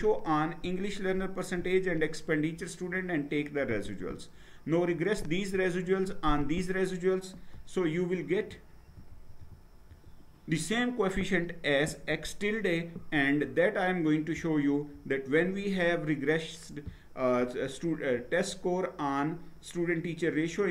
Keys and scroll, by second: 7.7 Down, 8.3 Down, 8.6 Down, 8.9 Down, 9.4 Down, 9.9 Down.